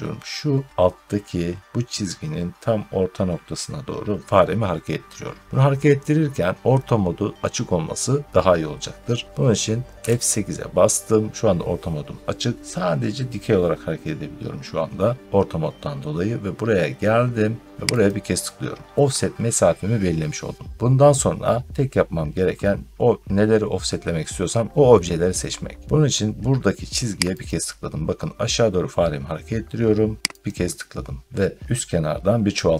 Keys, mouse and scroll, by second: 9.9 F8, 17.9 click, 27.4 click, 30.3 click, 31.1 scroll.